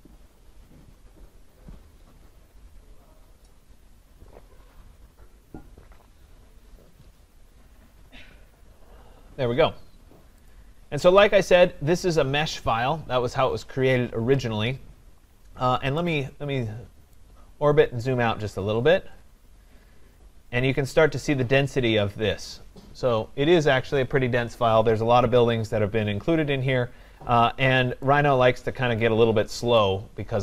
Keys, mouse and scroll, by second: 10.5 click, 11.1 click, 11.3-15.6 drag, 17.2 right click, 17.4-21.4 scroll, 21.7-22.2 scroll, 29.8 right click.